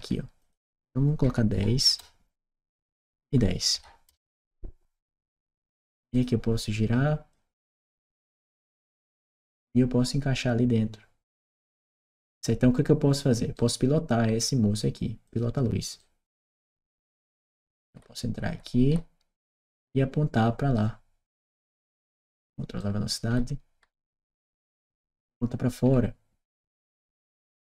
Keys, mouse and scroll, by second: 0.2 click, 1.1 1, 1.7 Return, 2.8 click, 3.1 1, 3.6 0, 3.9 Return, 5.9 click, 7.1-9.2 drag, 13.4 right click, 15.1 click, 15.8-20.6 right drag, 17.8 w, 21.4 click, 22.2 click, 22.6-27.7 right drag, 25.7 a.